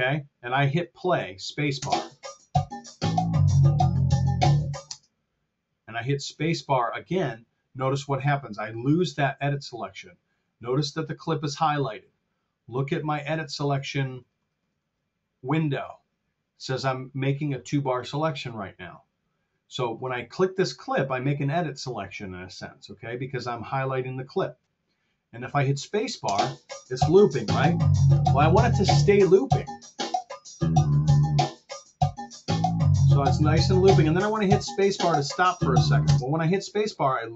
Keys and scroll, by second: 1.6 space, 4.8 space, 26.1 space, 36.0 space.